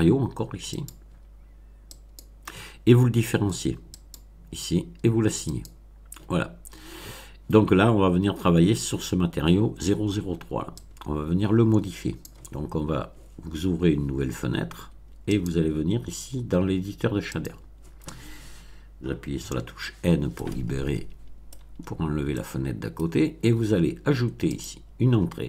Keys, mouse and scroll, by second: 0.7 click, 1.9 click, 3.9 click, 5.4 click, 10.7-12.4 drag, 15.2 click, 17.3 click, 19.3 n, 20.3-21.6 middle drag, 21.8 scroll up 1, 22.2-23.1 middle drag, 24.5 click.